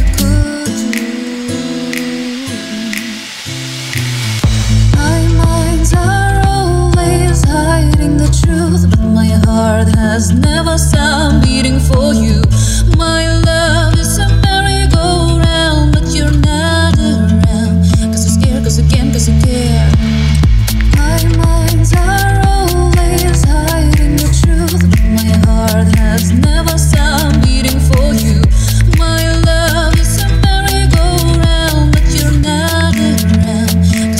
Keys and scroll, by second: 6.4-7.2 typing, 8.3-9.3 typing, 21.9 super+c, 23.1 super+v, 23.7-24.5 typing, 26.6 BackSpace, 29.4-30.7 typing, 29.6 Return, 31.0 Up, 31.4 Down, 31.7 Up, 31.9 Return, 32.3 Up, 32.9 Up, 33.6 Left, 33.9 Down, 34.1 Left.